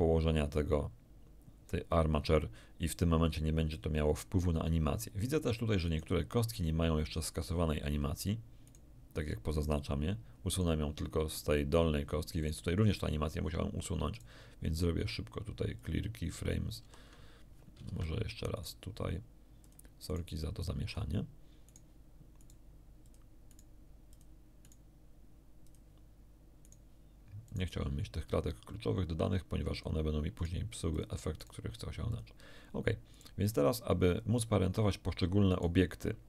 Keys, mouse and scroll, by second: 5.8 right click, 8.6 right click, 9.5 right click, 10.5 right click, 12.4 right click, 14.1 right click, 15.7 click, 16.7 shift+r, 17.8 ctrl+z, 18.5 ctrl+right click, 19.6 click, 20.1 right click, 20.8 click, 21.6 right click, 22.3 right click, 23.0 click, 23.5 right click, 24.1 click, 24.6 right click, 25.6 click, 26.6 right click, 27.4 right click, 29.7 click, 30.3 right click, 30.9 click, 31.3 right click, 32.1 click, 33.1 right click, 35.5 right click.